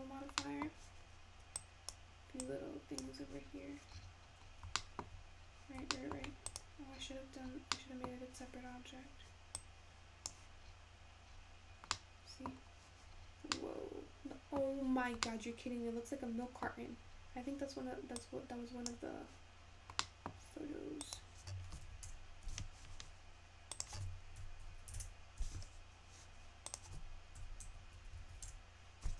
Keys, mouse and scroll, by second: 0.0-0.4 drag, 0.4-1.6 middle drag, 1.6-4.2 drag, 4.2-4.6 scroll down 10, 4.8-5.2 shift+middle drag, 5.2 scroll up 1, 5.7-6.2 scroll up 3, 6.2 shift+middle click, 6.5 click, 7.1-7.8 scroll up 7, 7.8-8.2 scroll down 3, 8.2 middle click, 8.4-9.6 scroll up 1, 9.6 click, 11.8-12.3 scroll up 1, 12.3-13.3 middle drag, 13.3-14.7 scroll down 5, 14.7-15.4 scroll up 1, 15.4-17.2 middle drag, 17.2-18.6 scroll up 5, 18.6-20.3 drag, 20.3-21.9 middle drag, 21.9-28.5 drag, 28.5 0.